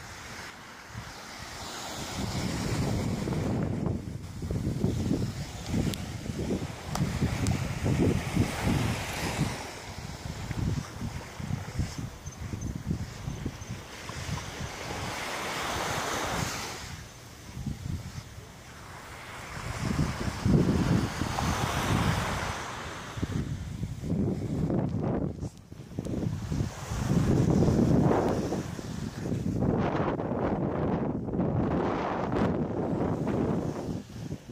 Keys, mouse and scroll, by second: 1.2 right click, 1.7 shift+right click, 2.5 m, 3.1 shift+middle click, 4.4 right click, 4.8 shift+right click, 5.6 m, 6.5 right click, 6.9 right click, 7.6 m, 8.4 right click, 8.7 shift+right click, 9.4 m, 9.9 middle click, 11.5 right click, 12.1 shift+right click, 13.1 m, 13.8 middle click, 15.2 right click, 15.5 shift+right click, 16.3 m, 16.8 middle click, 18.0 right click, 20.0 shift+right click, 20.8 m, 21.6 right click, 22.3 shift+right click, 23.0 m, 23.6 middle click, 24.3 scroll up 2, 25.2 right click, 25.9 shift+right click, 26.6 m, 27.2 middle click, 28.2 middle click, 29.1 scroll down 2, 30.4 l, 31.4 l, 32.0 l, 32.6-33.0 scroll down 5.